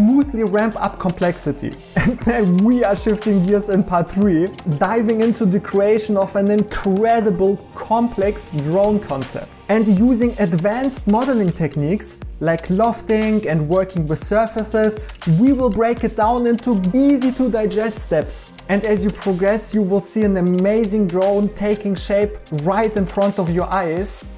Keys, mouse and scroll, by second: 0.9 Tab, 1.1 h, 1.5 2, 9.0-17.2 typing, 10.2 Escape, 11.2 right click, 11.9 right click, 12.1 right click, 12.3 right click, 12.5 right click, 15.1 right click, 16.8 right click, 17.5 right click, 18.1 ctrl+s, 18.3 alt+x, 19.3 right click, 19.5 a, 20.5 i, 20.7 ctrl+r, 20.7 Tab, 21.2 d, 21.3 d.